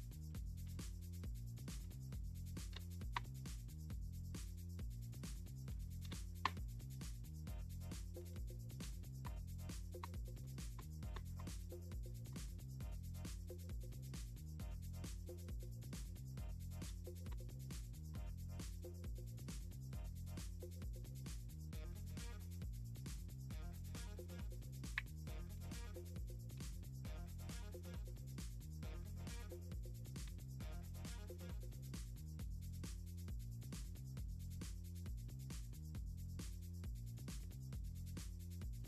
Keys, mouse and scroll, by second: 0.7 click, 1.7 click, 2.6 click, 2.7 space, 4.5 click, 5.7 click, 6.1 space, 8.2 click, 8.8-12.1 typing, 13.9 click, 14.7 click, 16.9 space, 17.7 space, 19.3-21.0 drag, 22.3-26.2 drag, 27.2-28.2 drag, 29.6-31.3 ctrl+drag, 32.0-34.5 drag.